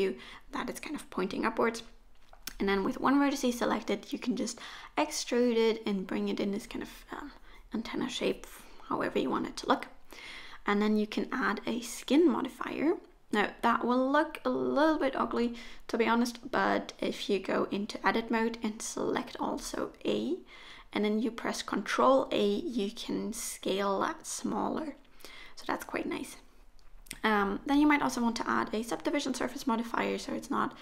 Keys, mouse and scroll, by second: 13.9 n, 14.5 a, 16.5 ctrl+a, 21.1 click, 23.4 middle click, 25.4-26.5 scroll up 1, 27.1 Tab, 27.8 Tab, 28.8 Tab, 29.4 g.